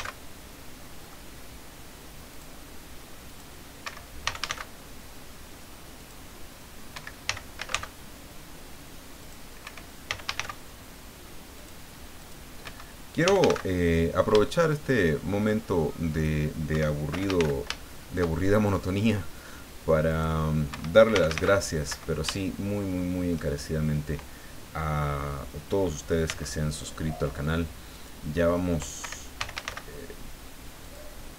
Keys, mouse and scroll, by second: 0.0 c, 1.0 middle click, 2.3 click, 3.3 click, 3.8 Escape, 4.2 f, 4.4 a, 4.5 c, 5.9 click, 6.9 Escape, 7.2 f, 7.5 a, 7.7 c, 9.2 click, 9.6 Escape, 10.0 f, 10.2 a, 10.3 c, 11.6 click, 12.2 click, 12.6 Escape, 13.2 f, 13.4 a, 13.5 c, 14.4 shift+middle click, 16.1 click, 16.7 Escape, 17.1 f, 17.3 a, 17.3 c, 17.8 shift+middle click, 20.1 click, 20.7 Escape, 21.1 f, 21.3 a, 21.3 c, 21.9 Escape, 22.3-23.5 shift+middle drag, 26.3 c, 27.9 click, 29.0 Escape, 29.4 f, 29.5 a, 29.6 c, 30.8 click.